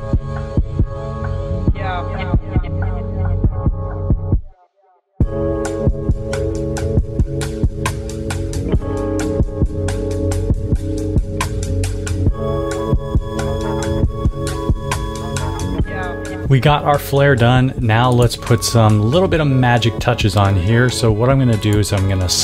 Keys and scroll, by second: 0.0-7.9 typing, 8.2 super+c, 8.6 super+-, 9.4-13.9 typing.